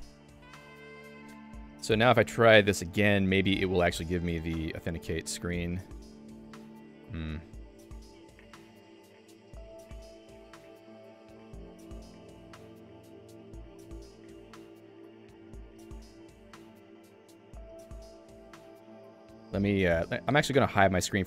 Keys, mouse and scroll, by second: 2.3 click, 6.9 ctrl+g, 9.7 click, 18.8 Escape.